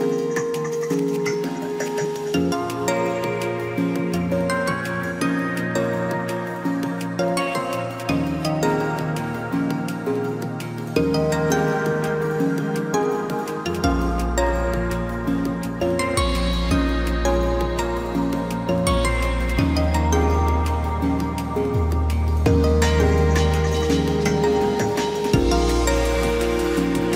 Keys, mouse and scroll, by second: 19.8 ctrl+t.